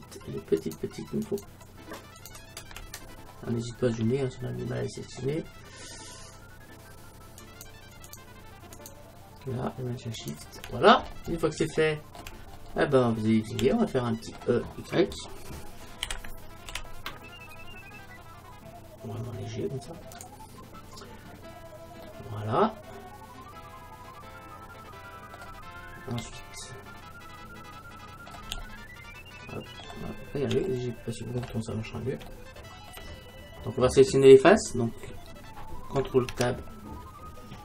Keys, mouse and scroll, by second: 7.5-11.8 right drag, 11.8-17.3 middle drag, 17.3 e, 20.3-22.1 drag, 21.4-23.0 middle drag, 23.6 middle click, 25.8 middle click, 26.4-27.7 middle drag, 30.7-31.8 middle drag, 36.4 ctrl+Tab.